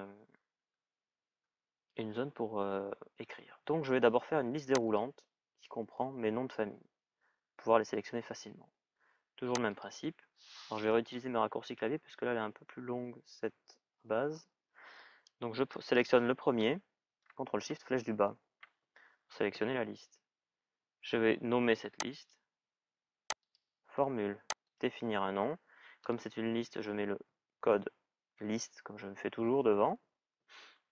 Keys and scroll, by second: 17.3 ctrl+shift+Down.